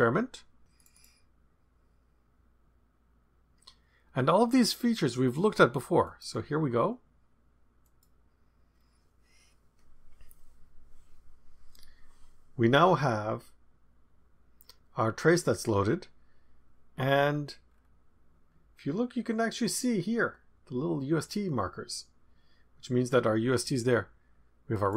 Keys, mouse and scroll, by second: 0.7 click, 6.0 click, 7.8 click, 16.9-17.6 scroll down 2, 17.6 scroll down 1, 17.7-18.5 scroll up 1, 24.7 click.